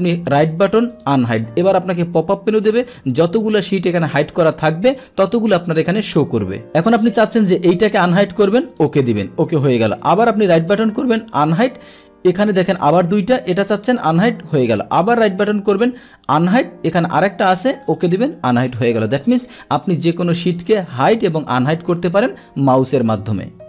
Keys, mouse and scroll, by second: 0.9 click, 2.5 click, 8.7 click, 10.0 right click, 11.3 click, 12.9 click, 13.6 click, 14.7 right click, 16.4 click, 17.8 click, 18.6 click.